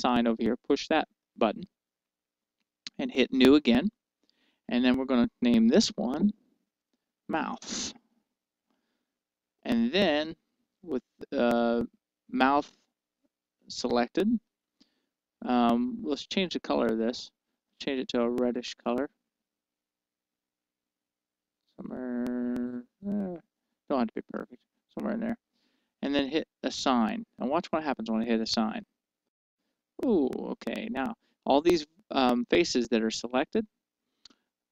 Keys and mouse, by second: 1.4-7.6 drag, 7.8 click, 8.2 click, 15.1-16.7 drag, 16.9-18.8 drag, 29.5-31.2 drag.